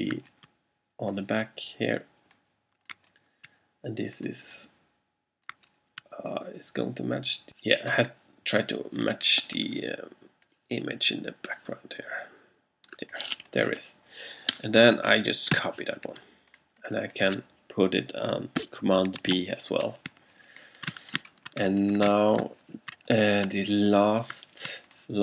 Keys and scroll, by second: 15.6 super+c, 19.4 super+b, 20.1 alt+super+b, 20.9 alt+space.